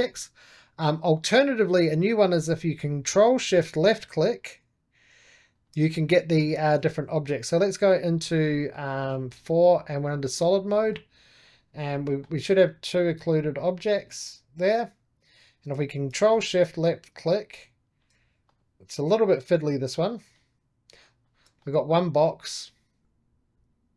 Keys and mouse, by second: 3.4-7.6 ctrl+shift+drag, 7.6 4, 8.0 click, 8.4 middle click, 8.4-10.6 drag, 10.6-14.3 middle drag, 16.2-18.3 ctrl+shift+drag, 18.4-21.5 drag, 21.5-23.9 middle drag.